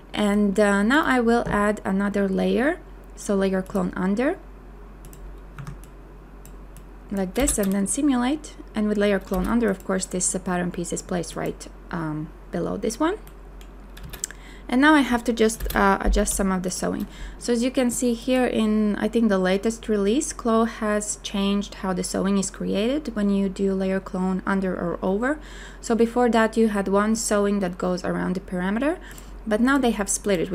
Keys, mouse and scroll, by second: 5.6 q, 7.4 space, 14.0 space, 16.2 b.